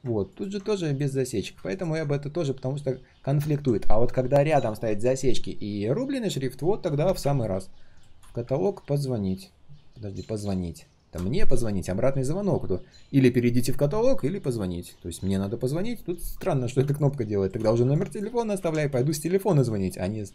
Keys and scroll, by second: 18.5 ctrl+z.